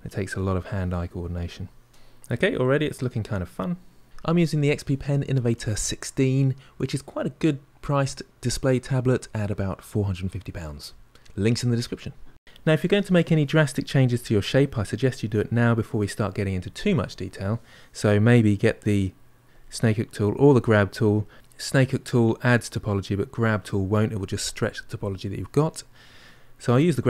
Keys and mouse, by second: 0.2 shift+click, 1.0-2.2 middle drag, 2.2 shift+click, 2.7 middle click, 3.2 shift+click, 4.1 middle click, 4.7 shift+click, 5.5-13.1 middle drag, 19.4-21.3 drag.